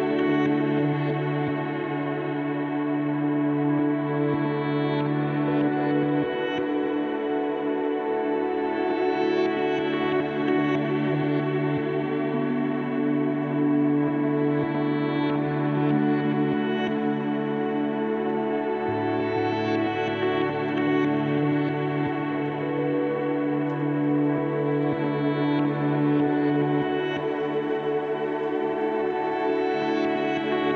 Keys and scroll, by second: 1.3 `, 6.7 KP_1, 6.8 KP_1, 7.2 KP_0, 9.5 `, 24.4 1, 24.8 1.